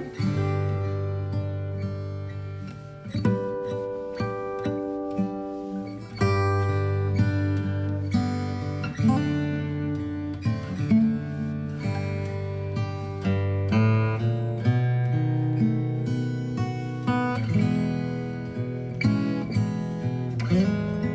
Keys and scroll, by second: 7.5 space, 8.9 Down, 10.6 space, 11.6 shift+Right, 11.9 space, 13.3 space, 15.1 ctrl+shift+g, 15.9 ctrl+shift+g, 16.7-19.0 typing.